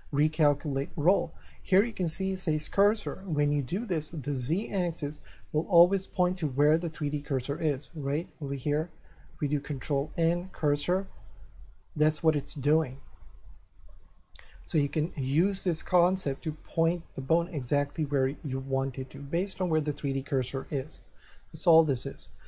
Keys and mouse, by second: 3.7 click, 5.3 middle click, 8.0 click, 8.7 middle click, 9.5 ctrl+n, 10.4 click, 11.2 middle click, 12.9 middle click, 14.6 click, 15.3 ctrl+n, 16.0 click, 18.0 middle click, 20.5 middle click, 22.0 ctrl+n.